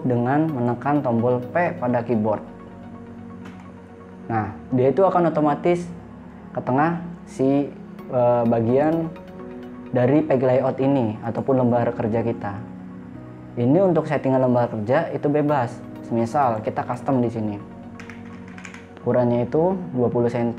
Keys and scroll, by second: 3.9 p, 18.4 2, 18.9 0.